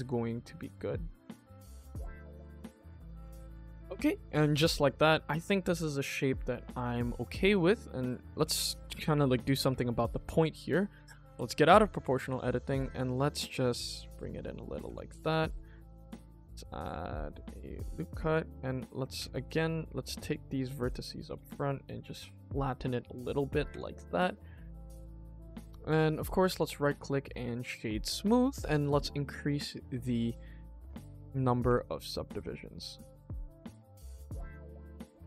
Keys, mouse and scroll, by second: 0.6 alt+click, 0.9 alt+click, 1.5 g, 1.5 middle click, 1.5 scroll down 2, 1.7 middle click, 2.2 middle click, 2.3 middle click, 2.4 middle click, 2.5 middle click, 3.1 scroll up 1, 3.3 middle click, 5.0 middle click, 5.5 click, 5.9 middle click, 6.0 scroll up 1, 6.4 shift+middle click, 6.8-7.5 scroll up 3, 7.7 scroll down 1, 8.4 shift+middle click, 8.8 scroll down 1, 9.1 middle click, 9.6 Tab, 10.3 click, 11.2 o, 12.1 g, 14.4 shift+middle click, 14.8 Tab, 15.2 ctrl+r, 18.6-19.0 scroll down 1, 19.1 Tab, 19.5-20.8 drag, 21.1 s, 23.8 click, 24.2 middle click, 24.3-24.7 scroll down 1, 24.7 middle click, 25.4 click, 26.1 right click, 26.7-27.2 scroll up 2, 27.2 click, 27.5-27.9 scroll down 2, 27.9-28.8 scroll up 2, 28.8 click, 29.2 click, 29.5 scroll up 2, 29.7 scroll down 1, 29.8 middle click, 30.5 shift+middle click, 30.8 click, 31.1-31.4 middle drag, 31.6 Tab, 32.3 click, 32.9 g, 34.7 Tab, 34.9 click.